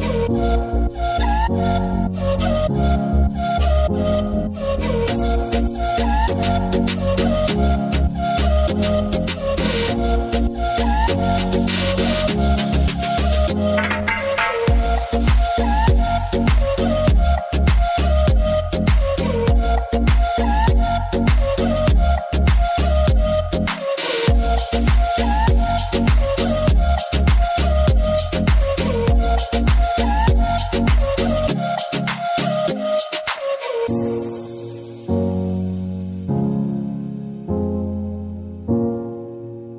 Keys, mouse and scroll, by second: 2.1 n, 4.2 click, 5.4 n, 6.6 click, 7.3-12.6 middle drag, 12.8 scroll up 1, 14.0 scroll down 1, 16.2 space, 17.8 click, 20.5 click, 22.1-25.2 middle drag, 25.2 scroll down 1, 26.2-31.0 drag, 31.0-35.1 middle drag, 35.1 click, 36.3 space, 39.5 click.